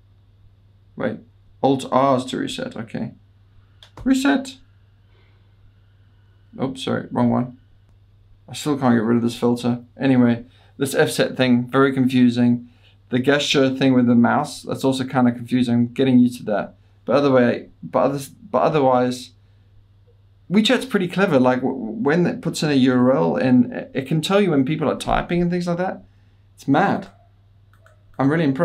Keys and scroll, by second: 0.2 F10, 0.6 F9, 4.0 super+r, 7.2 alt+r.